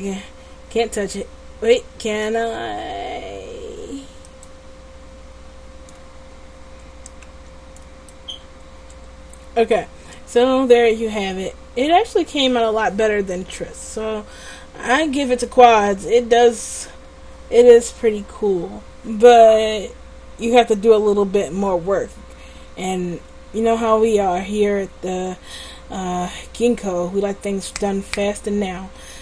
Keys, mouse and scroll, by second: 8.7 Tab.